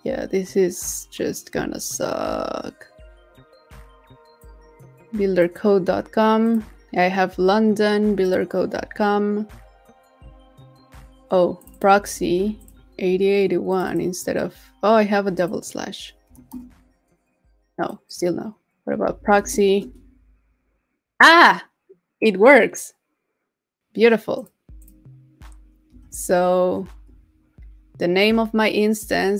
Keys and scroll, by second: 12.2 super+c, 19.3 super+v.